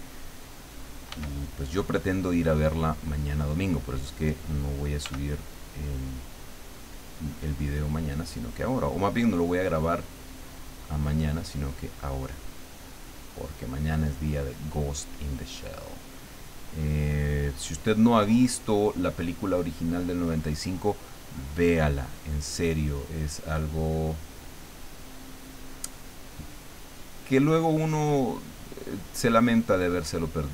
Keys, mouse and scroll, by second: 1.1 f, 3.2 click, 5.0 f, 5.7 click, 6.2-10.5 drag, 10.9-13.2 drag, 13.4-16.0 drag, 16.4-18.8 drag, 19.6 click, 20.4-22.0 drag, 22.4-24.3 drag, 24.7-25.9 drag, 26.0-27.3 drag, 27.7-29.3 drag, 29.7-30.5 drag.